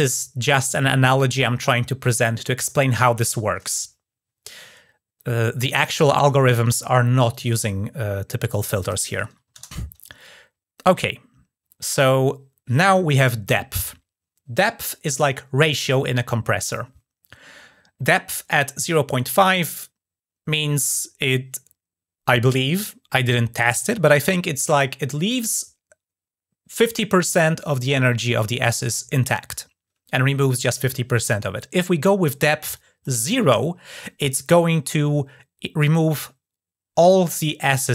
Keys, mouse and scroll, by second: 7.1 click, 32.5 click.